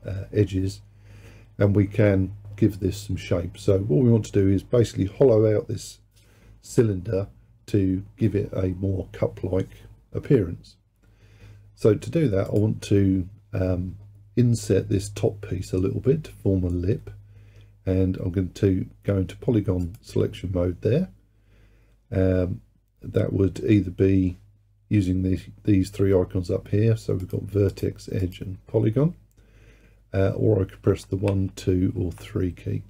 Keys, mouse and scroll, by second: 12.5 click, 19.9-22.9 drag, 27.3-30.9 drag, 30.9 1, 31.3 2, 32.0 3.